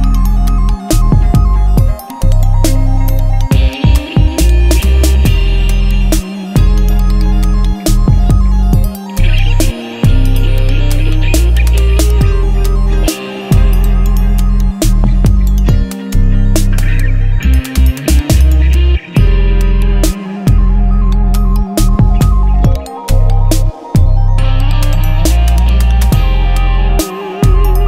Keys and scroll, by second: 3.9-8.3 typing, 8.8 ctrl+Return, 12.4-13.4 typing, 16.6 Return, 16.8 ctrl+v, 17.4 Return, 18.0 ctrl+z, 18.7 v, 20.4 ctrl+t, 23.6 Return, 23.9 Up, 24.7 Down, 24.9 Up, 25.2 Down, 25.4 Up, 25.6 Down, 26.0 Up, 26.2 Down, 26.3 Up.